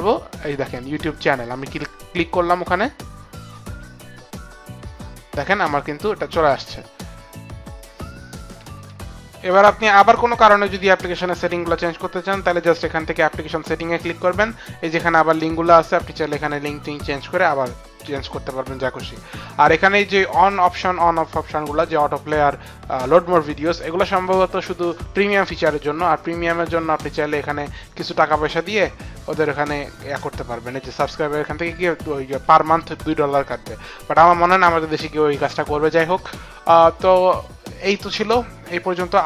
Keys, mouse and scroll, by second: 1.2 click, 13.4 click.